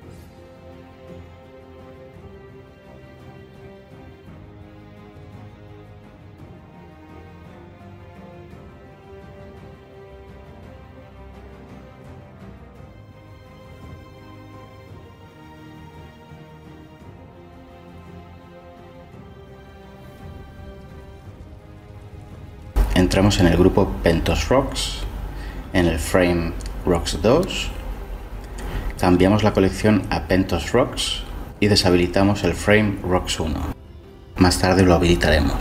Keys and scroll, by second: 12.6-15.0 typing, 15.7 Delete, 16.6 ctrl+c, 18.0 ctrl+v, 18.2 s, 18.4 Return, 18.9 ctrl+v, 19.3 Delete, 19.8 ctrl+v, 20.1 Right, 20.2 Right, 20.2 Delete, 20.4 Delete, 20.4 Left, 20.6 Delete, 20.6 Return, 21.2 ctrl+v, 21.5 Delete, 21.6 Left, 21.7 Return, 22.2 ctrl+v, 22.4 Delete, 22.5 Return, 23.3 Tab, 26.8-28.3 typing, 28.4 Return, 33.4 m.